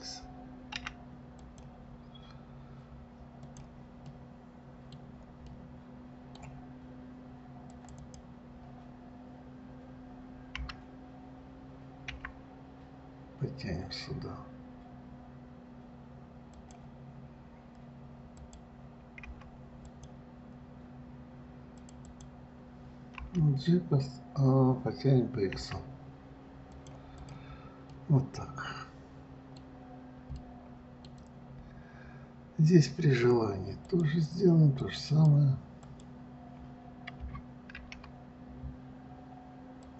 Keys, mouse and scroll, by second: 3.7 click, 4.3-8.0 middle drag, 8.0 click, 8.2 click, 10.8 g, 18.6 click, 22.0 click, 22.3 click, 23.4 g, 27.4 click, 28.2-30.1 middle drag, 30.1-30.4 scroll down 2, 30.6-31.7 middle drag, 31.7-32.3 scroll up 2, 32.4 scroll down 1, 34.1 click, 35.1 click, 35.3 click, 36.1 click.